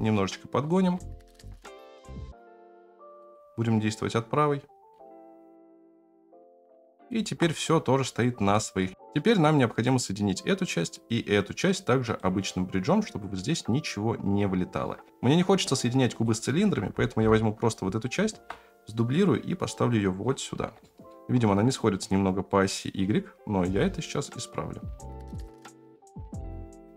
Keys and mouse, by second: 0.9-1.3 shift+middle drag, 1.9 shift+click, 2.2 g, 5.0-7.1 shift+middle drag, 8.5 shift+drag, 9.7-10.9 drag, 11.6-12.1 drag, 13.3-14.7 middle drag, 16.1 click, 17.1 KP_7, 18.3 shift+d, 20.8 shift+middle drag, 25.3 g, 26.7-26.9 drag.